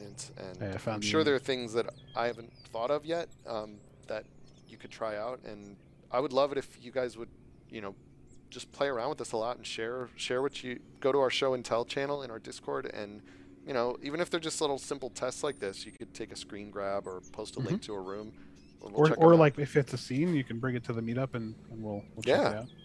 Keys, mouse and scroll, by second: 3.8 click, 21.3 click.